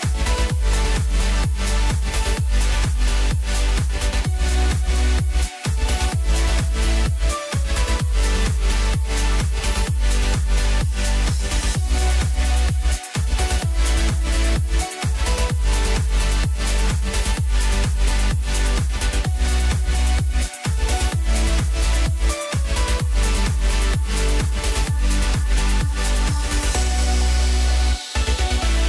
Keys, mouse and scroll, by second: 0.4-3.4 middle drag, 3.7 click, 4.2-4.8 scroll up 2, 4.8 click, 6.5 Tab, 9.0 click, 9.8 click, 10.9 KP_3, 16.3 s, 18.8 s, 22.9-23.4 scroll up 2, 23.4-23.7 scroll down 1, 23.7 middle click, 24.4-25.4 scroll up 5, 26.2 i.